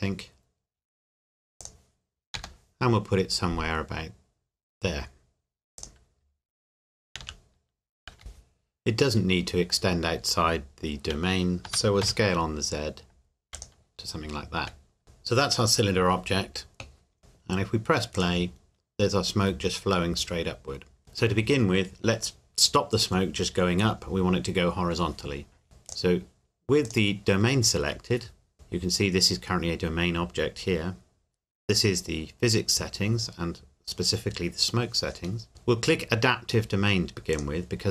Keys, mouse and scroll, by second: 1.6 click, 2.4 g, 5.8 click, 7.2 KP_1, 11.6 s, 12.0 z, 13.5 click, 18.1 click, 21.0 scroll down 1, 25.9 click, 35.5-37.3 scroll down 1, 37.6 click.